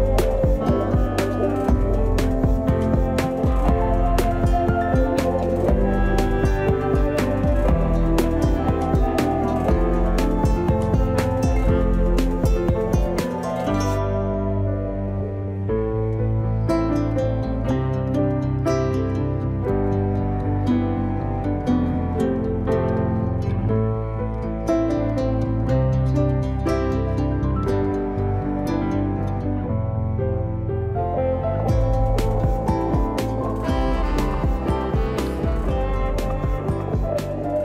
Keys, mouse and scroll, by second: 1.3-4.2 middle drag, 4.2 click, 6.5 ctrl+click, 7.2-8.6 middle drag, 8.6-10.9 drag, 16.1-18.4 drag, 19.2-21.9 middle drag, 21.9 click, 23.3-25.7 drag, 27.0 click, 29.1-31.4 drag, 35.2-37.6 middle drag.